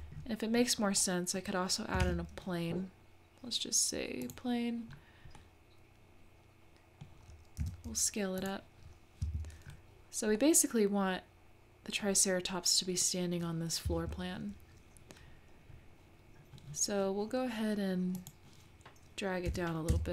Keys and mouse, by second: 1.0-1.5 middle drag, 2.0 shift+a, 5.4-5.9 drag, 5.4-6.4 middle drag, 5.4-5.9 right drag, 6.4-7.1 drag, 7.6 s, 9.2 `, 10.4-11.4 drag, 11.4 middle click, 11.5-12.2 drag, 13.9 click, 18.2 click, 19.5 g.